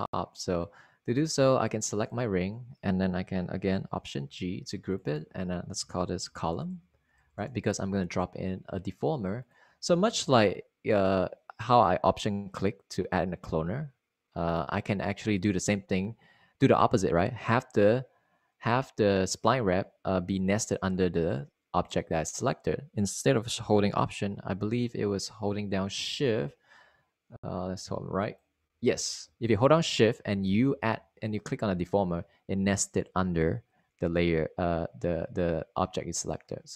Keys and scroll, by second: 5.4 alt+g, 6.6-8.8 typing, 31.5 super+z.